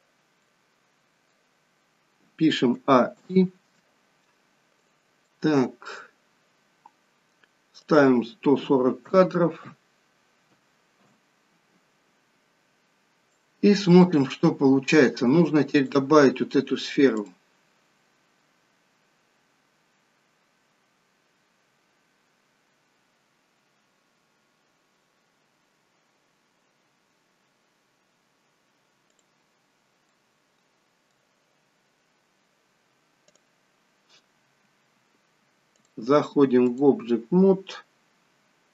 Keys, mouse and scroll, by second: 2.9 middle click, 2.9 a, 3.2 i, 3.8 middle click, 4.8 click, 5.3 middle click, 8.0 click, 13.4 click, 17.3 click, 29.3 click, 30.1 middle click, 33.4 click, 35.8 click.